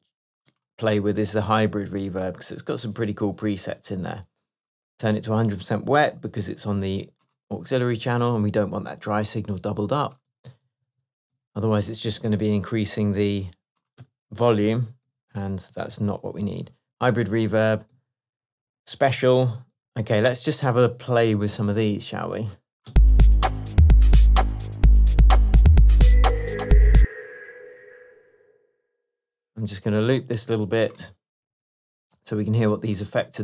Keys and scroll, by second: 21.0 Return, 23.0 space, 24.4 Tab, 28.5 space, 31.6 super+l.